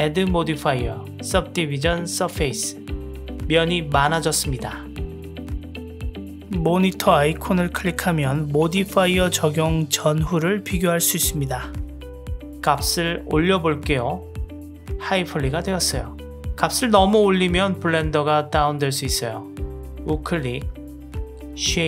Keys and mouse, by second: 2.9 drag, 5.1 click, 7.7 click, 9.2 click, 11.2 click, 11.9 click, 13.0-14.4 drag, 19.5 right click.